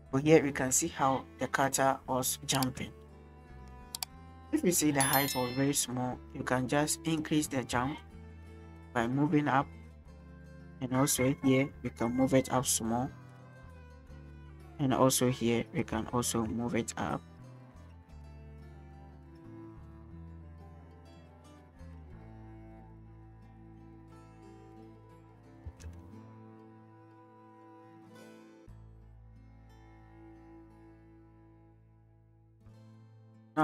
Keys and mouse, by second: 1.1-1.6 shift+drag, 3.3 click, 3.8 shift+drag, 5.5 click, 5.9-7.2 drag, 7.8 shift+drag, 8.6 click, 10.1 click, 11.3 shift+drag, 14.2 click, 14.6-15.8 drag, 16.0 shift+drag, 17.1 click, 20.2 click, 23.9-25.6 drag, 25.7 space, 33.1 space.